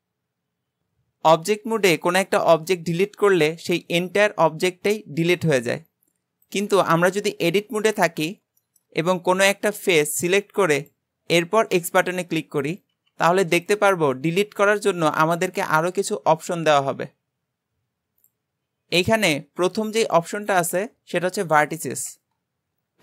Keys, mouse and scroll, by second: 5.3-6.5 scroll up 6, 6.5 click, 6.8-8.0 shift+middle drag, 8.0 Tab, 8.6-9.7 shift+middle drag, 9.7 click, 10.8 click, 11.2-11.8 scroll up 2, 11.8 x.